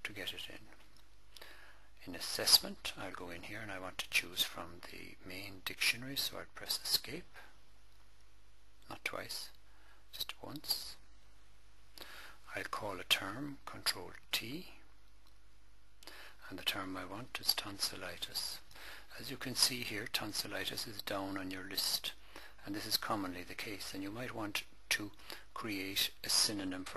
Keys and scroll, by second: 2.2 Return, 6.6 Escape, 8.7 Return, 10.0 Escape, 14.1 ctrl+t, 16.5-18.3 typing, 20.8 Down, 22.7 Down, 24.3 Down.